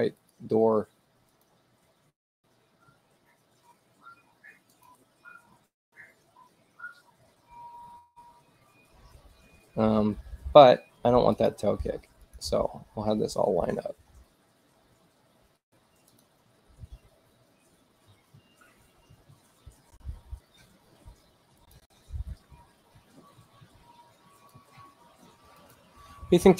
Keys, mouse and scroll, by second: 0.2 click, 1.3 click, 4.5 click, 11.2 click, 12.1 click, 15.9 click, 21.7 click, 24.5 click, 25.6 click.